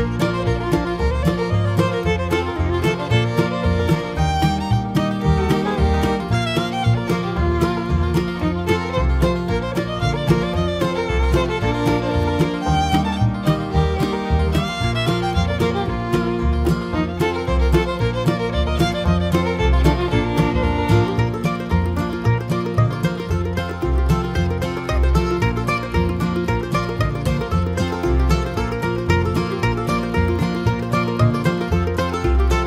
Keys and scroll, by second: 14.6 ctrl+t, 17.4 Return.